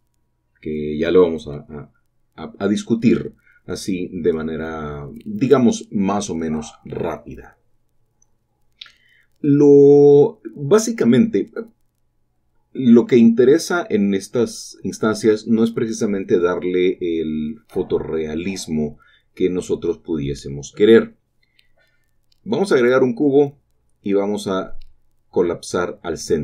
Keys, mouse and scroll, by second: 1.6 click, 2.2-3.6 drag, 7.1 n, 9.5-10.6 drag, 9.5 typing, 10.9 click, 16.4 typing, 22.9-23.9 drag, 24.1 Tab.